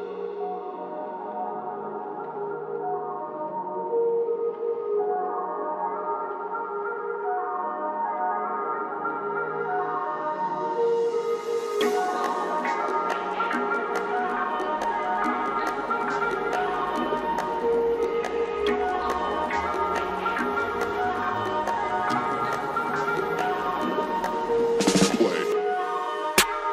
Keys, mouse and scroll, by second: 0.9-2.5 drag, 3.5 c, 4.4-12.4 drag, 12.5 click, 16.9 click, 18.9-20.3 drag, 20.3 ctrl+z, 20.8 click, 23.5 ctrl+z.